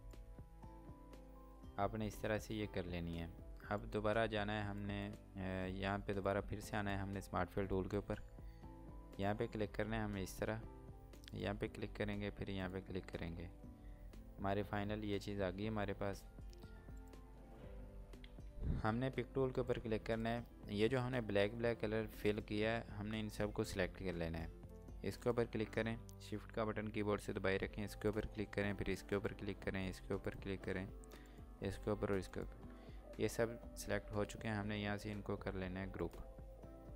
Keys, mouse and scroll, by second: 0.5 scroll down 1, 3.8 scroll down 1, 3.8 click, 5.1 click, 17.0 click, 19.4 click, 21.1 scroll down 1, 25.1 scroll down 1, 25.3 click, 28.1 shift+click, 29.2 shift+click, 30.3 shift+click, 31.3 shift+click, 32.4 shift+click, 35.9 click, 36.8 scroll up 1.